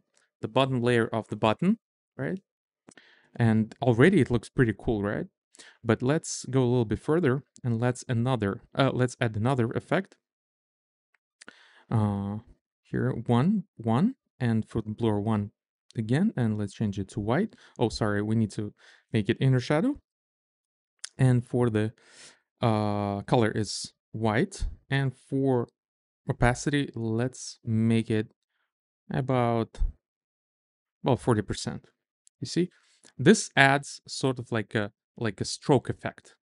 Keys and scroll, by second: 12.5 1, 15.1 1, 26.0 shift+Up, 27.2 shift+Down, 28.0 shift+Up, 28.4 shift+Down, 30.6 Up, 31.2 Up, 32.7 Return.